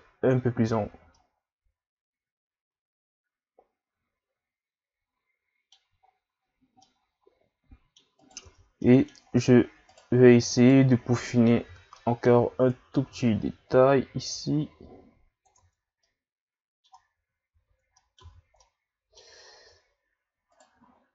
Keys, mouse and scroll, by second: 0.6 a, 1.2-4.3 middle drag, 6.1-6.5 scroll down 3, 6.5-6.8 scroll up 1, 6.8-8.2 middle drag, 8.2 right click, 8.4 Tab, 8.8 middle click, 9.2 scroll up 2, 9.9 right click, 10.6 shift+right click, 11.7 o, 11.9 middle click, 12.7 click, 15.6 Tab, 15.8 scroll down 2, 16.0-17.2 middle drag, 17.2 ctrl+z, 17.5 ctrl+z, 18.0 middle click, 18.2 Tab, 18.6-19.3 middle drag, 19.3-20.5 scroll up 2, 20.5 right click.